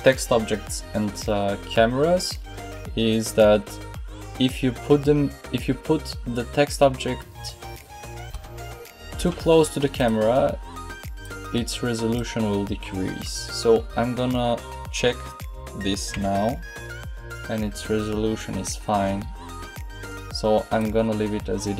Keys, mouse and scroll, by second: 8.2 g, 11.1-14.3 drag, 16.0 p, 18.8 p, 20.7-21.7 right drag.